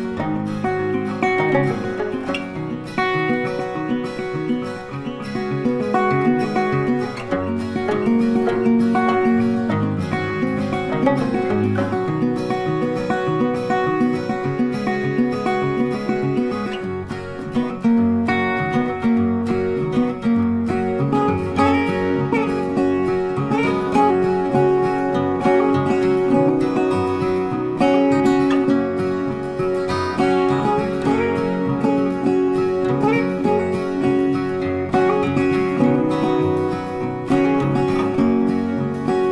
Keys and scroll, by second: 10.2 ctrl+t, 33.2 ctrl+t.